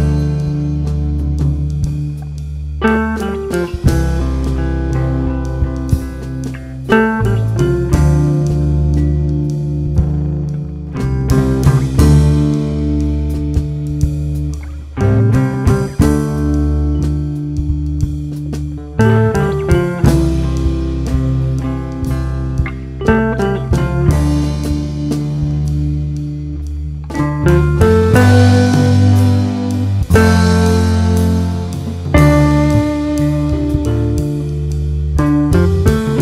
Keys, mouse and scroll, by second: 0.2 scroll up 1, 0.7 `, 1.2-1.9 scroll up 2, 1.9 `, 3.4 alt+a, 3.4 `, 4.7 scroll down 2, 5.0 `, 6.2 scroll down 2, 6.5 `, 8.2-8.6 scroll up 2, 8.6 `, 11.2 click, 12.0 shift+click, 12.4 j, 13.4 click, 13.8 shift+click, 14.2 g, 15.7 2, 15.9 `, 17.0 alt+a, 17.2 `, 18.2 alt+a, 18.4 scroll down 1, 18.6 `, 18.9 scroll up 1, 19.1-19.6 scroll down 1, 19.6 `, 20.0-20.3 scroll up 1, 20.3 1, 20.7 click, 22.4 g, 23.2 scroll up 1, 23.4 scroll down 1, 23.6 `, 24.0 scroll up 1, 24.2 scroll down 1, 25.0-25.4 scroll up 1, 25.4 `, 25.6-26.0 scroll up 1, 26.1 shift+click, 26.5 j, 26.8 scroll down 1, 27.0 a, 28.0 `, 29.2 Tab, 29.4 `, 30.1 ctrl+r, 32.1 g, 32.6 click, 32.9 `, 33.8 scroll up 1, 34.0 Tab, 34.6 alt+a, 34.7 `, 35.4-35.8 scroll up 1.